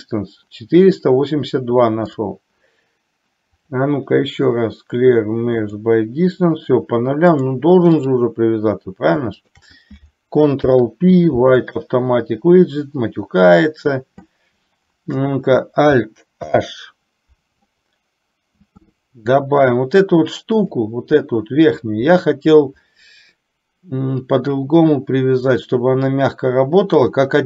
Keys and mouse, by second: 2.3 click, 3.7-5.9 drag, 7.6 click, 9.4 shift+click, 10.7 ctrl+p, 16.7 alt+h.